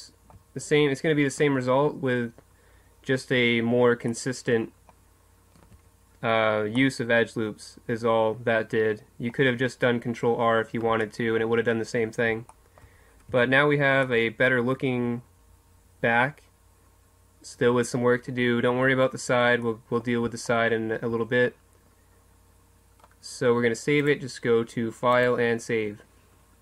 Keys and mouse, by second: 4.1-5.8 middle drag, 5.8 Tab, 7.9 middle click, 10.7-13.2 middle drag, 13.3 Tab, 13.8 middle click, 19.6 middle click, 22.2 middle click, 22.3 middle click, 23.9 middle click, 24.0-26.6 drag.